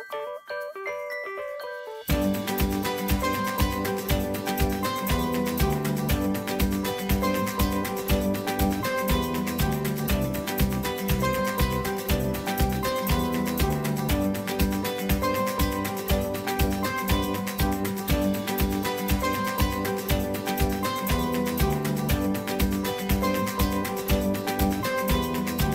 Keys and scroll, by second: 3.7-7.8 typing, 14.5 typing, 15.7 typing.